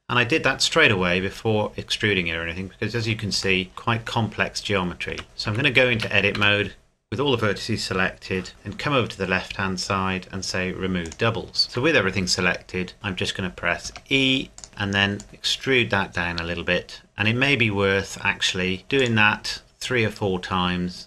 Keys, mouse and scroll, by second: 1.2 Tab, 2.5 scroll up 1, 3.6 shift+middle click, 5.1 Tab, 5.5 a, 5.9 a, 6.3 a, 9.2 a, 10.3-10.9 scroll down 1, 11.1 click, 11.6-12.0 scroll down 1, 13.8-14.6 scroll down 1, 14.6 click, 18.8 e, 19.0 click.